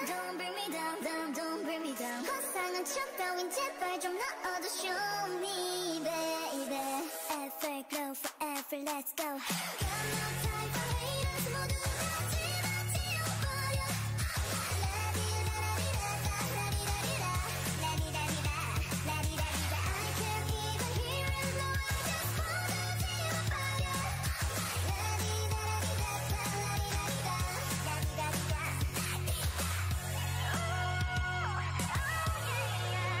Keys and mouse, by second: 2.9-4.9 right drag, 4.3-7.9 drag, 11.6 a, 14.2-17.2 right drag, 15.7-20.5 drag, 20.5 right click, 21.2-22.2 right drag, 24.1-26.7 drag, 24.1-26.7 right drag, 28.0-30.1 drag, 31.7-33.2 middle drag.